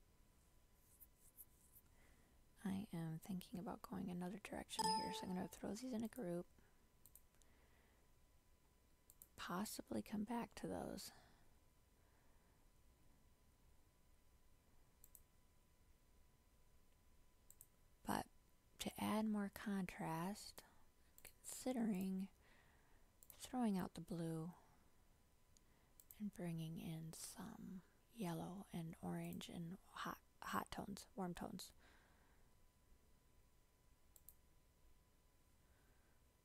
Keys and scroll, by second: 4.6 ctrl+g.